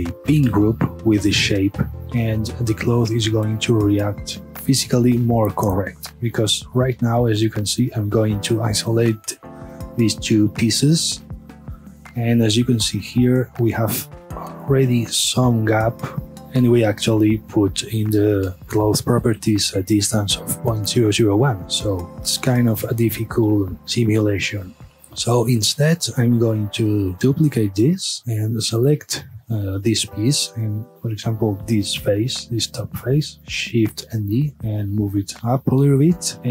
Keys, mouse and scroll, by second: 2.0-4.5 middle drag, 5.6-6.8 middle drag, 6.8 scroll up 1, 7.1-8.5 middle drag, 8.5 shift+click, 10.3 KP_Divide, 11.5 a, 11.7 scroll up 1, 12.3-16.4 middle drag, 16.4 click, 17.4 click, 18.5 scroll down 1, 21.8-23.3 middle drag, 24.9 KP_Divide, 25.3 scroll down 1, 25.6-27.1 middle drag, 27.1 click, 27.1 shift+d, 28.0 click, 28.7 scroll up 1, 28.9-30.1 middle drag, 30.1 Tab, 30.6 click, 31.2-33.6 middle drag, 33.6 shift+d, 35.6 click, 36.0-36.4 middle drag, 36.4 Tab.